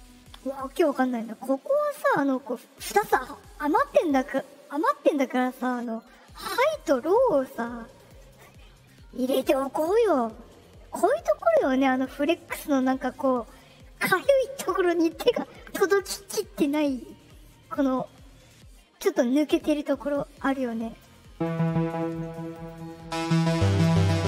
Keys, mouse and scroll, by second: 6.1 click, 7.4 click, 20.1-20.9 drag, 22.0 right click, 22.5 click.